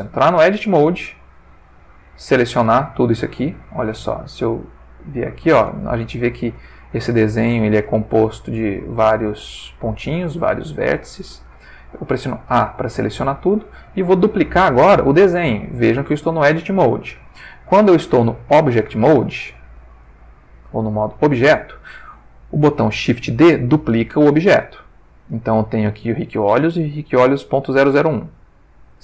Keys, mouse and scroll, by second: 0.1 Tab, 1.2 click, 2.5 g, 3.2 Escape, 4.4 click, 5.8-6.5 ctrl+middle drag, 6.7-7.9 ctrl+shift+middle drag, 8.4 click, 8.9 g, 9.9 Escape, 10.5 ctrl+middle click, 12.5 a, 13.0 shift+middle click, 17.7 Tab, 20.0 ctrl+Tab, 20.9 ctrl+click, 24.0 shift+d, 25.3 click.